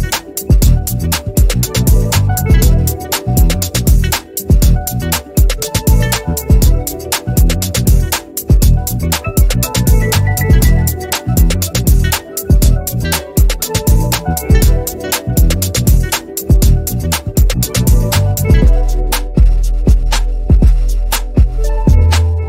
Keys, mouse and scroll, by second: 0.8 ctrl+z, 1.3-2.7 drag, 5.5-6.4 typing, 7.5-11.8 drag, 12.2-13.1 typing, 13.7-15.2 drag, 15.2 v, 15.7 click, 16.4 ctrl+c, 16.7 click, 17.2 ctrl+alt+v, 18.6-21.0 drag.